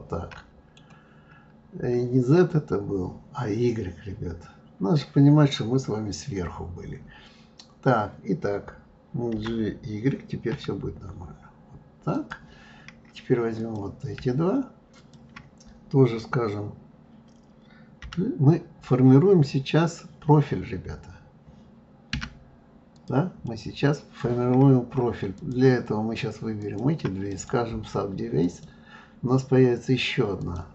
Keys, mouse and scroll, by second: 13.6 click, 14.9 shift+click, 22.9 click, 23.4-25.3 middle drag, 25.3 shift+click, 26.6 shift+click, 27.3-30.3 right drag, 30.4 click.